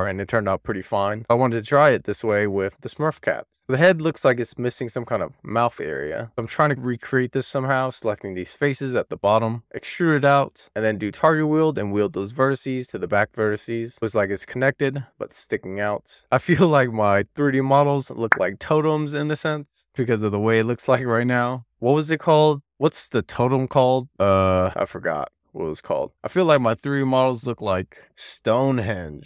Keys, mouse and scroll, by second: 0.0 middle click, 1.0 Tab, 1.6 middle click, 3.4 2, 4.2 click, 5.0 shift+click, 5.4-8.4 middle drag, 9.1 middle click, 9.6 d, 10.5 click, 10.6 Tab, 11.0 alt+q, 11.8 Tab, 12.3 click, 13.8 click, 14.3-15.4 middle drag, 16.1-16.5 scroll up 1, 17.2 alt+middle click, 17.6 alt+middle click, 17.9 alt+middle click, 19.1 middle click, 20.6 scroll up 1, 20.7 middle click, 21.5-22.1 scroll down 1, 22.1-22.5 scroll up 1, 22.5-23.3 scroll down 2, 24.2 ctrl+click, 25.3 shift+click, 26.1 shift+click, 26.6 middle click, 28.4 middle click.